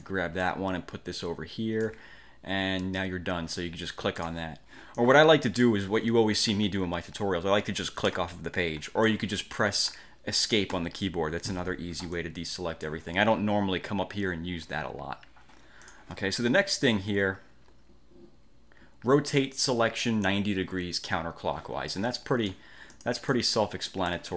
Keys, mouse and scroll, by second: 0.5-2.1 ctrl+shift+drag, 4.3 click, 5.1 click, 8.2 click, 9.2-10.3 drag, 10.9 Escape, 12.3 click, 16.0 click, 22.0 click, 23.0 click.